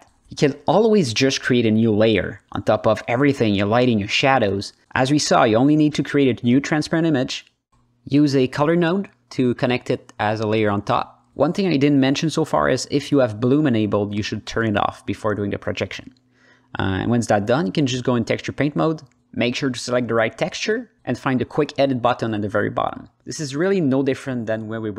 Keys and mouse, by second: 7.4-7.9 drag, 8.2-8.7 drag, 9.0 click, 9.5 h, 10.0-10.6 drag, 12.2 ctrl+space, 15.3 click, 17.5-18.7 drag, 19.8 drag, 20.3 alt+middle click, 21.5 alt+middle click, 22.7-23.1 alt+middle drag, 23.5 alt+middle click, 24.6 click.